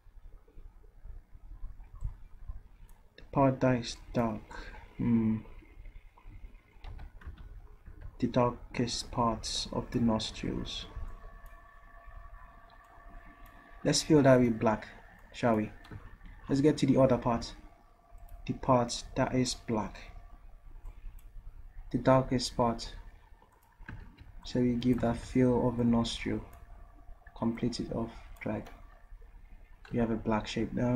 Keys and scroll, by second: 6.9 ctrl+z, 7.3 ctrl+z, 7.9 ctrl+z, 24.1 ctrl+z, 25.1 ctrl+z.